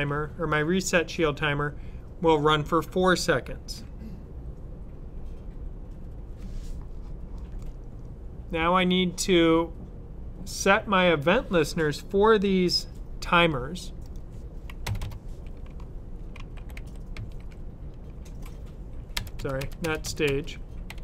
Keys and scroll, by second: 15.3-21.0 typing.